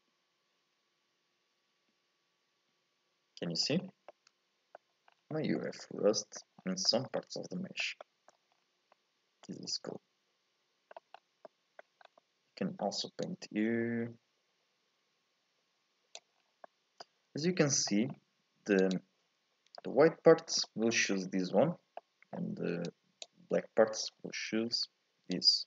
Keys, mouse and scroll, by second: 3.7-4.1 scroll up 2, 4.1 middle click, 5.1-5.4 scroll up 2, 5.4 shift+middle click, 5.8 scroll up 1, 5.9 middle click, 6.6 scroll down 1, 6.9-8.3 shift+middle drag, 8.3 scroll up 1, 8.5-8.9 scroll down 4, 8.9 middle click, 9.4-9.9 scroll up 2, 9.9-11.2 middle drag, 11.2 scroll up 1, 11.5 middle click, 12.1 scroll up 2, 12.2-13.3 shift+middle drag, 13.3-16.3 drag, 16.4 scroll down 1, 16.7-18.1 middle drag, 18.1-18.9 scroll up 2, 18.9 ctrl+shift+click, 19.8-22.9 middle drag, 22.9-25.3 drag.